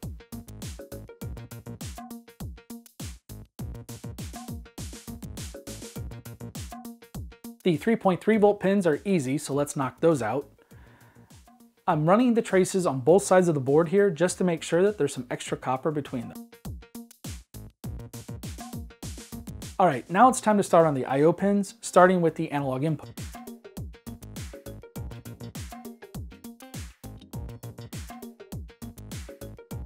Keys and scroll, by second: 1.9 BackSpace, 3.4 BackSpace, 14.8 v.